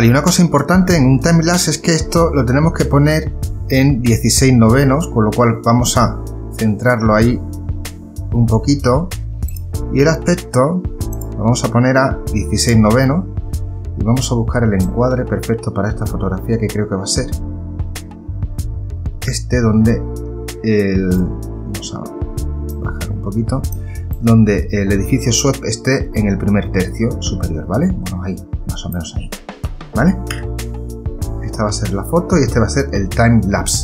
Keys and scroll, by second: 30.7 Return.